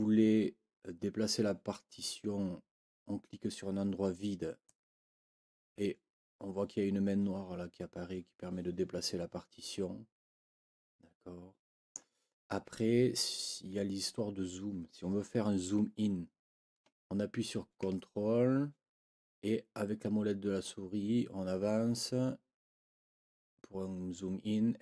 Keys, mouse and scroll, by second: 4.6-7.4 drag, 8.4 click, 8.6 click, 8.8 click, 9.1 click, 19.6-20.2 ctrl+scroll up 4, 21.0 ctrl+scroll up 2, 22.4 ctrl+scroll down 2, 22.9 ctrl+scroll down 2.